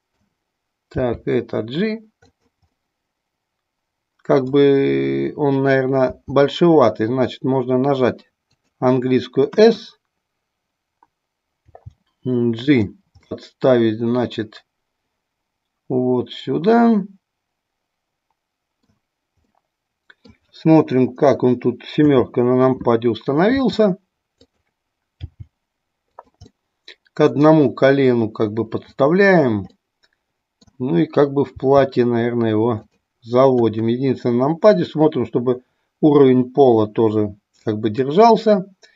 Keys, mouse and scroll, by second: 0.9 g, 2.7-4.7 middle drag, 6.1 s, 8.6 click, 11.6 g, 12.7 click, 13.4-19.0 middle drag, 19.5-20.3 middle drag, 23.6 r, 24.6 click, 25.3 g, 26.2 click, 26.6-29.0 middle drag, 29.7 scroll up 1, 29.9-30.7 middle drag, 31.6 g.